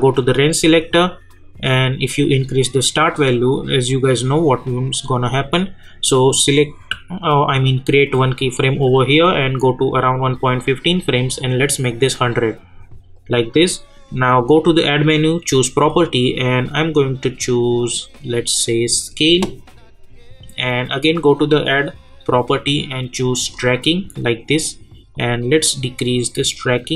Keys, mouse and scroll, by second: 8.1 click, 10.5-15.0 drag, 19.0 click, 21.4 click, 24.1 scroll down 1, 25.1-26.9 drag.